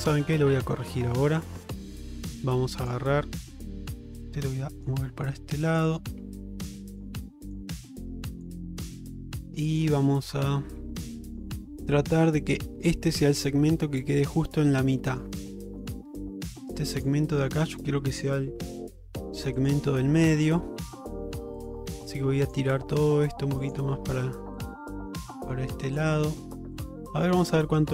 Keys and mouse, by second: 0.2 middle click, 0.8 shift+middle click, 1.2 middle click, 2.0 shift+middle click, 2.9 click, 4.1 g, 5.7 click, 6.2 g, 7.5 click, 7.8 g, 8.8 middle click, 9.8 click, 10.5 g, 12.2 middle click, 13.2 middle click, 15.0 middle click, 15.7 shift+middle click, 17.0 click, 19.0 g, 20.5 g, 21.9 g, 22.9 middle click, 23.7 click, 23.9 g, 25.0 middle click, 25.9 click, 26.1 g, 27.1 middle click.